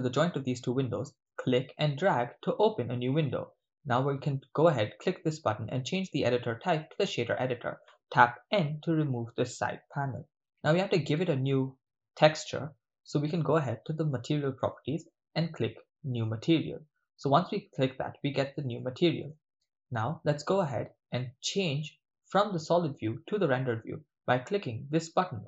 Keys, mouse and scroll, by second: 1.2-3.1 drag, 5.1-6.9 drag, 9.3 n, 14.6 click, 16.1-25.4 drag.